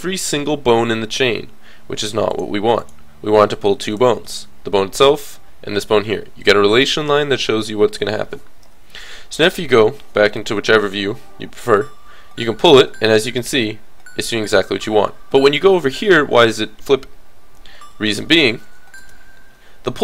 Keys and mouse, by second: 2.3-3.8 drag, 3.8 middle click, 8.6 KP_3, 11.8 g, 18.7 alt+r, 19.0 alt+g.